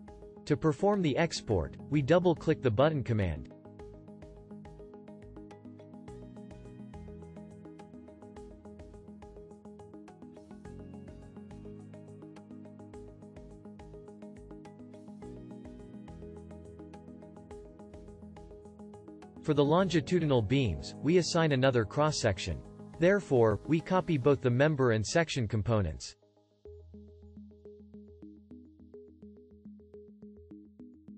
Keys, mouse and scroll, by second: 22.2-24.1 alt+drag, 26.2-28.0 shift+drag.